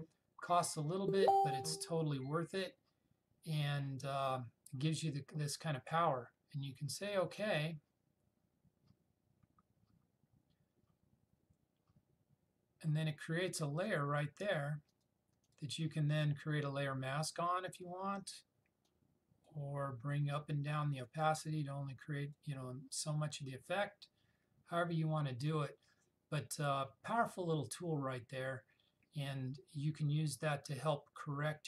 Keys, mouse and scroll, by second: 7.3 click, 15.0 click, 17.9-19.5 drag.